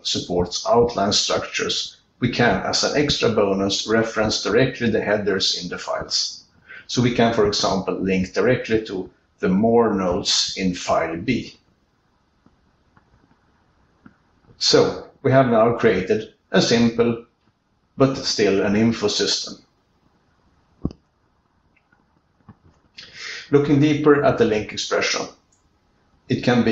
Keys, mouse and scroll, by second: 4.5 c, 4.7 ctrl+n, 4.9 ctrl+n, 5.8 typing, 6.9 ctrl+n, 7.5 ctrl+n, 7.5 typing, 7.7 ctrl+n, 8.0 ctrl+n, 8.2 ctrl+n, 8.8 Tab, 9.6 ctrl+n, 9.8 ctrl+n, 10.1 ctrl+n, 10.3 ctrl+n, 10.3-11.7 typing, 12.0-12.5 ctrl+f, 12.7 ctrl+f, 13.6 alt+Return.